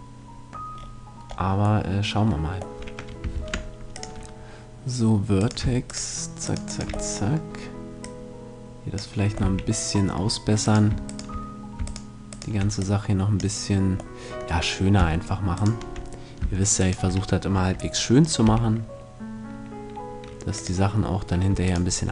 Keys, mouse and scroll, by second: 3.3 ctrl+Tab, 5.4-8.4 right drag, 7.1-8.2 middle drag, 8.0-9.6 drag, 8.4 middle click, 9.4 a, 9.6-12.6 middle drag, 10.6-14.0 right drag, 12.8-14.7 drag, 14.0-16.2 middle drag, 15.6-18.4 right drag, 18.4 s, 20.7-22.1 drag, 21.6-22.1 right drag.